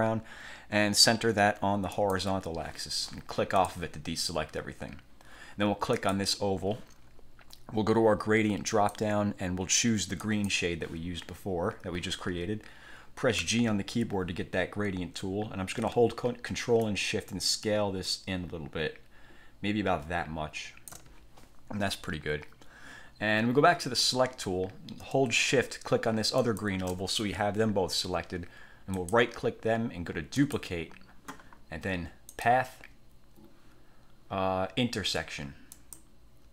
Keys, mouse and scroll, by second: 2.1 click, 3.7 click, 6.1 click, 8.8 click, 10.3 click, 13.5 g, 17.0-21.3 ctrl+shift+drag, 23.9 click, 26.5 shift+click, 29.1 click, 30.5 click, 32.5 click, 35.9 click.